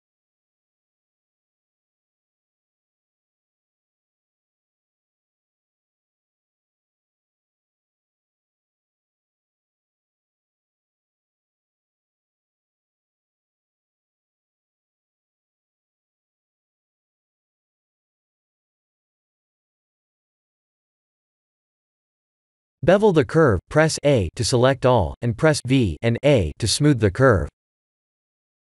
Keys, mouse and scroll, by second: 0.2 e, 2.6 KP_7, 4.6 KP_1, 6.1 e, 11.5 e, 13.3 e, 17.3 Tab, 19.3 click, 21.2 click, 22.2 scroll down 2, 23.2 shift+click, 27.1 Tab, 27.7 a, 28.1 v.